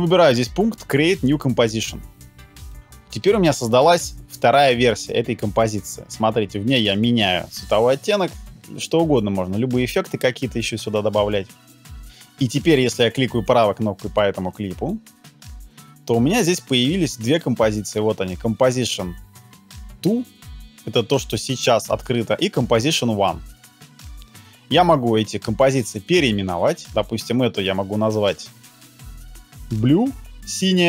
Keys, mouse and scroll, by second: 14.8 right click.